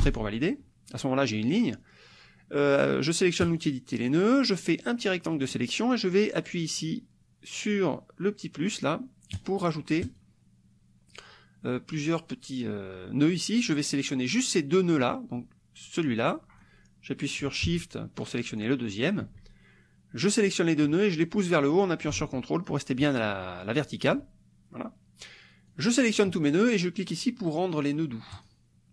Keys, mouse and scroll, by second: 0.0 Return, 3.6 click, 4.6-5.7 drag, 9.4 click, 10.2 click, 13.8 click, 15.9 click, 18.2 shift+click, 20.5-24.1 drag, 25.7 click, 28.3 click.